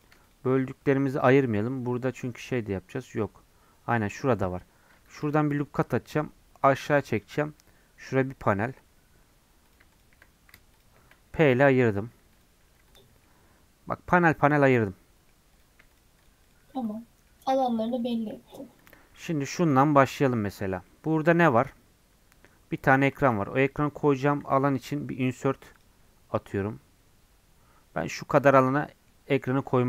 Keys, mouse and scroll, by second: 0.0 click, 5.1 ctrl+r, 9.1 3, 9.7 click, 10.8 shift+click, 11.9 p, 12.6 Tab, 12.9 click, 13.2-15.5 middle drag, 15.5-17.2 drag, 17.2 middle click, 17.5 scroll up 1, 17.7 middle click, 18.5-19.7 drag, 19.7 KP_Decimal, 20.9 middle click, 21.7 Tab, 23.2 ctrl+r, 24.4 ctrl+r, 28.5-29.7 middle drag, 29.7 3.